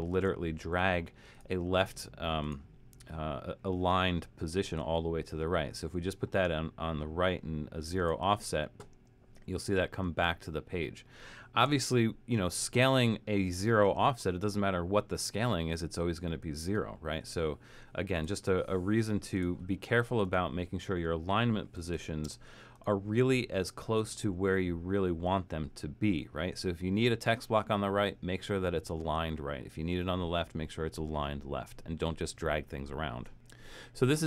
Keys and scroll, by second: 0.1 shift+Return, 11.8 shift+Return, 21.5-22.7 typing.